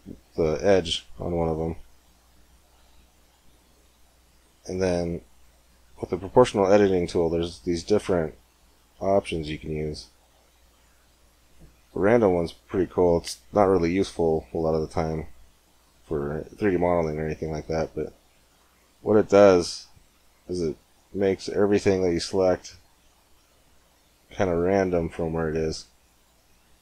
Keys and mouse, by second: 1.1 middle click, 2.8 z, 6.6-8.4 drag, 17.3 g.